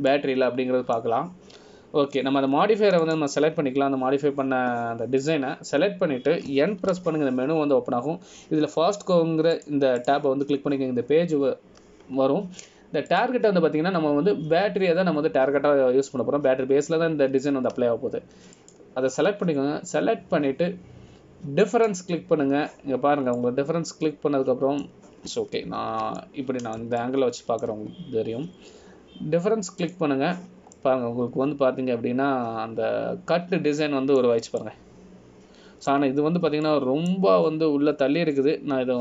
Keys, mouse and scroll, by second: 0.4 click, 1.0-2.3 scroll down 2, 2.3 middle click, 5.2 click, 11.7 click, 12.2 click, 15.3 click, 23.9 click, 25.1-25.5 scroll up 1, 25.5 middle click, 27.8 ctrl+z, 28.3 middle click, 29.2 shift+middle click, 30.0 scroll up 1, 32.0 click, 32.8 scroll up 1, 32.9 middle click, 36.8 middle click, 38.8 shift+middle click.